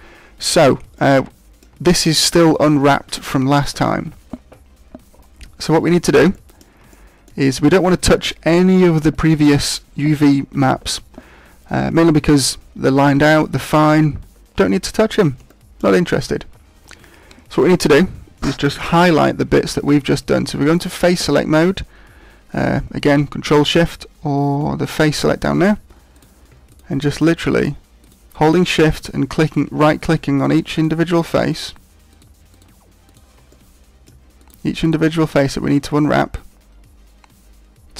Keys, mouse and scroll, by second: 3.9 shift+middle click, 5.5-6.5 scroll up 6, 6.3 shift+middle click, 6.9 middle click, 11.0-12.3 scroll up 3, 12.3-12.9 scroll up 1, 14.9-15.5 scroll up 1, 15.5 shift+middle click, 19.7 ctrl+Tab, 26.1 right click, 26.7 shift+right click, 27.1 shift+right click, 27.5 shift+right click, 28.0 shift+right click, 28.4 shift+right click, 28.9 shift+right click, 29.5 shift+right click, 30.0 shift+right click, 30.3 shift+right click, 30.7 shift+right click, 31.1 shift+right click, 31.5 shift+right click, 32.1 shift+right click, 32.5 shift+right click, 33.0 shift+right click, 33.4 scroll up 1, 33.6 middle click, 34.4 shift+right click, 34.8 shift+right click, 35.1 scroll down 4, 35.7 middle click.